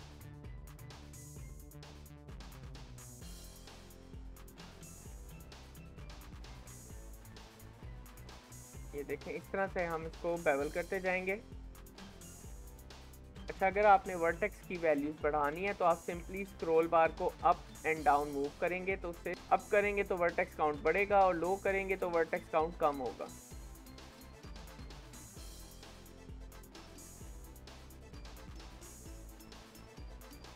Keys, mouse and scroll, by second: 0.9 click, 1.4 ctrl+shift+b, 2.1 shift+middle click, 2.7 click, 3.3 shift+middle click, 3.6 click, 4.1 ctrl+shift+b, 5.2 click, 5.8 ctrl+shift+b, 6.8 shift+middle click, 7.2 click, 7.6 ctrl+shift+b, 13.2 click, 16.0 ctrl+shift+b, 25.2 shift+middle click, 26.0-27.3 drag, 27.3 shift+middle click, 27.7 click, 28.1 ctrl+shift+b, 30.4 shift+middle click.